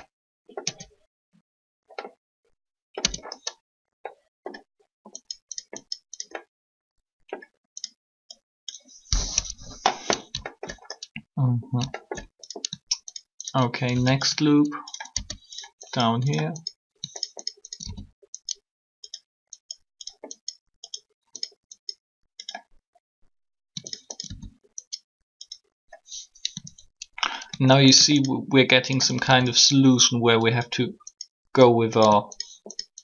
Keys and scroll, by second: 0.6 Tab, 3.0 Tab, 9.2 3, 15.1 shift+s.